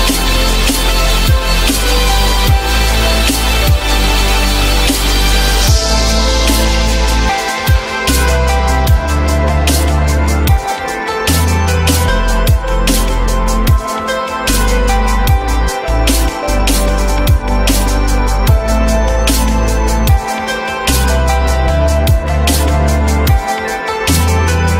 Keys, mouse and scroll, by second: 0.4 shift+click, 7.3 F4, 9.8 F4, 13.0 shift+click, 15.2 F4, 16.5 F4, 18.6 shift+click, 19.3 shift+click, 21.2 ctrl+click, 21.9 shift+click.